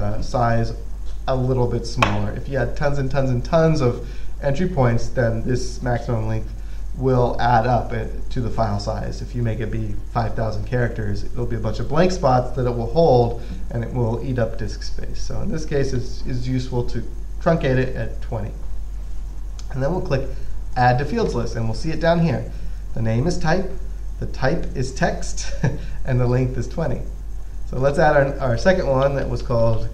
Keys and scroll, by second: 29.1-29.9 typing.